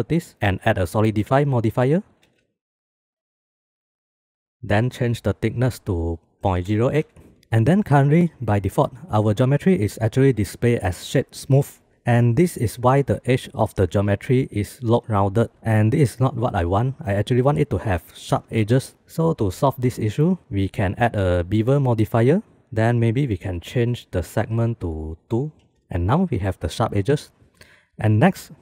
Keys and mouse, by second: 0.3-1.8 drag, 2.5 shift+click, 2.9 shift+b, 5.5-7.4 drag, 7.4 ctrl+s, 20.7-21.8 drag, 24.3 click, 25.8 shift+middle click.